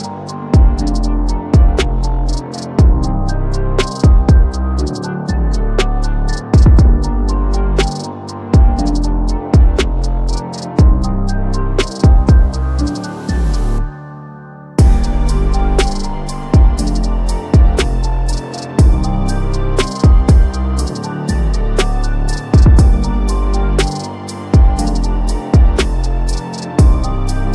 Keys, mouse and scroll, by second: 1.4 alt+scroll up 1, 2.2 space, 2.3 click, 2.5 space, 4.7 click, 5.2 r, 6.5 alt+click, 15.2-19.4 drag, 20.4 click, 21.1 p, 22.2 ctrl+alt+z, 22.9 alt+click, 24.3-25.9 typing.